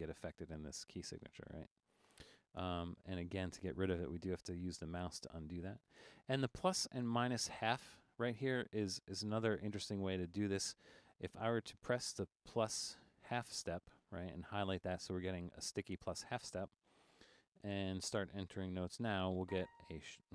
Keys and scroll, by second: 1.0-1.6 typing, 2.6 BackSpace, 17.3 BackSpace, 19.4 a.